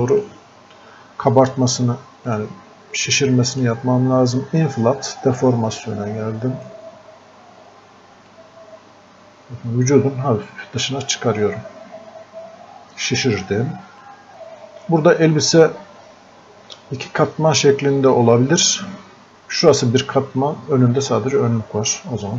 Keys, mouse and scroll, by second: 5.7-8.3 drag, 8.3-14.0 drag, 14.0-22.3 drag.